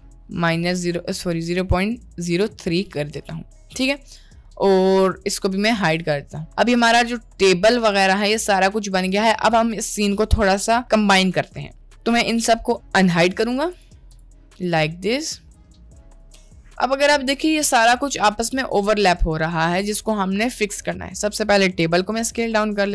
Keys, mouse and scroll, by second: 2.6-3.0 middle drag, 5.8 click, 13.4 click, 13.7 click, 14.1 click, 15.2 click, 16.1 click, 17.1 click, 17.9-19.3 middle drag, 21.8 s.